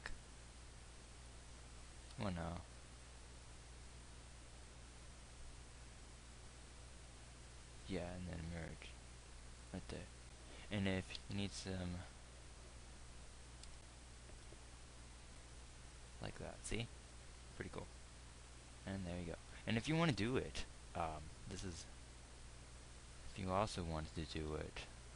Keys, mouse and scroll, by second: 8.8 alt+m, 11.7 z, 14.1 Tab, 22.1 Tab, 23.8 Tab, 24.7 KP_1.